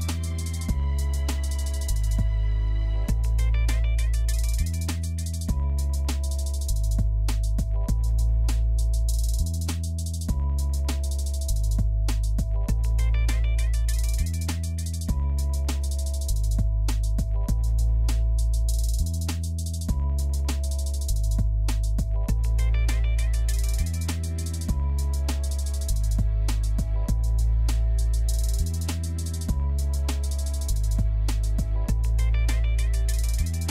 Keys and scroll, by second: 1.3-2.3 typing, 18.4-19.2 typing, 24.6-26.4 typing.